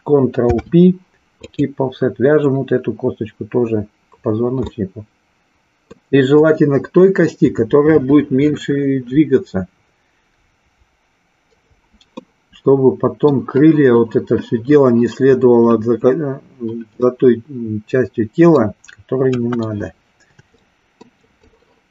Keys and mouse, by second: 0.4 ctrl+p, 4.8-6.0 middle drag, 12.3 middle click, 17.0-18.8 middle drag, 19.4 KP_1, 20.5 shift+middle click, 21.4-21.9 drag.